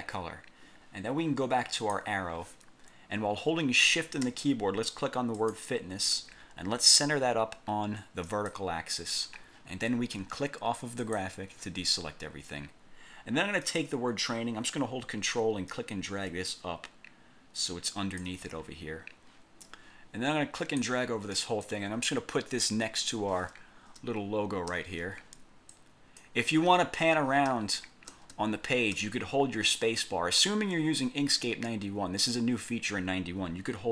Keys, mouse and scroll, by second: 1.9 click, 5.5 shift+click, 8.3 click, 11.2 click, 13.8 click, 15.9-18.5 ctrl+drag, 18.7-19.0 ctrl+scroll up 3, 19.8-21.1 drag, 21.8-23.4 drag, 24.1 space, 25.9 click, 27.6 alt+space.